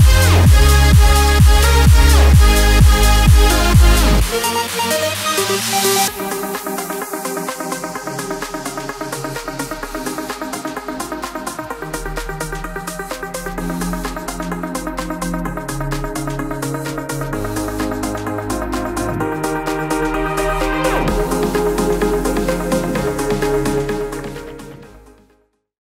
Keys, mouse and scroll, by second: 1.9-4.7 drag, 4.7-6.2 scroll down 1, 6.2 click, 8.7-17.9 drag, 20.2 click, 21.1 alt+scroll down 1, 22.9 space, 23.1 click, 23.4 space, 24.8 click.